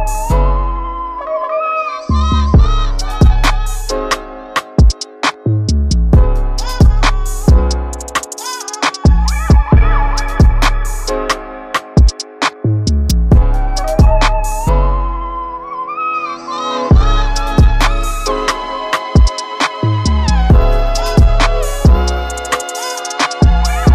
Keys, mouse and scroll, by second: 7.5-10.6 drag, 13.4-16.6 drag, 18.1 g.